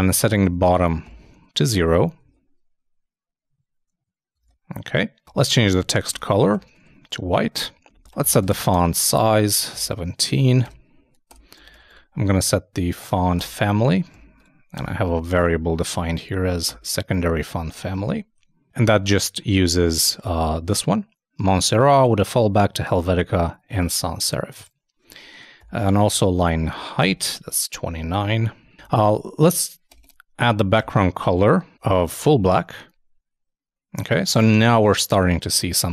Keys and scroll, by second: 0.0-0.9 typing, 1.5 super+;, 1.6 super+s, 1.8 super+Tab, 2.3 super+i, 4.4 super+Tab, 5.5-6.8 typing, 32.1 super+Return, 32.3 super+s, 32.5 super+Tab.